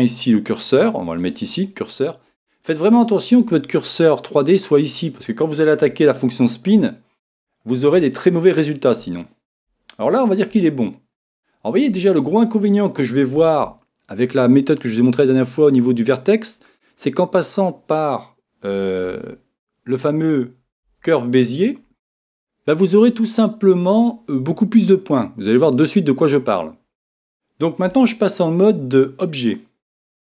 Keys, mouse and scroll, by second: 1.2 click, 6.3-13.3 middle drag, 19.1 shift+a, 27.9 Tab.